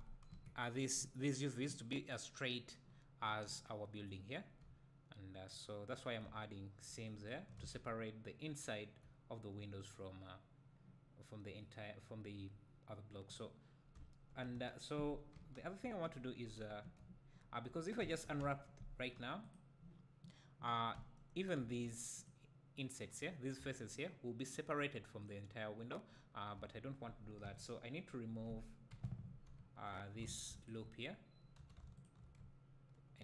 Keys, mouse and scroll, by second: 0.3 KP_1, 2.1-2.9 scroll down 2, 2.9-4.7 scroll up 2, 4.7 `, 7.6 alt+a, 7.8 scroll up 1, 8.6 `, 13.4 click, 14.1 `, 15.3 KP_1, 15.8 KP_3, 16.8 1, 17.3-18.0 scroll up 2, 18.0 `, 18.4 a, 21.0 `, 21.6 2, 22.2 click, 23.6 3, 24.5 click, 26.6 a, 27.4 KP_1, 28.9 KP_3, 30.3 alt+a, 30.6 alt+click, 31.6 2, 32.0 alt+click.